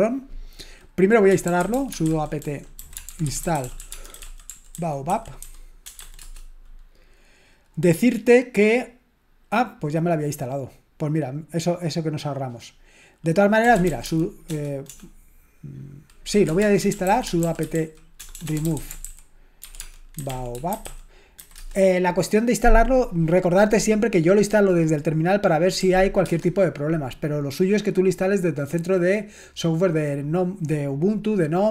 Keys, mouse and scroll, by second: 1.2-6.2 typing, 13.6-14.9 typing, 16.2-22.0 typing, 26.2 typing.